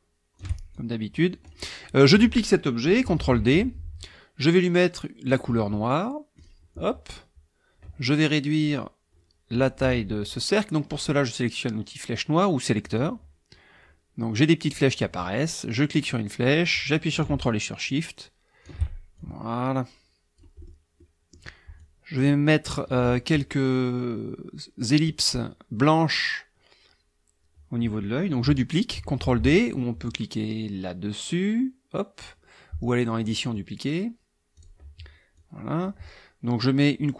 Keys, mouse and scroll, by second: 0.7-1.7 ctrl+shift+drag, 3.2 ctrl+d, 5.3 click, 6.4 click, 12.8 click, 15.9-18.8 drag, 19.2-20.6 ctrl+shift+drag, 21.0 click, 21.8 click, 33.2 click, 34.5 click, 35.4 click.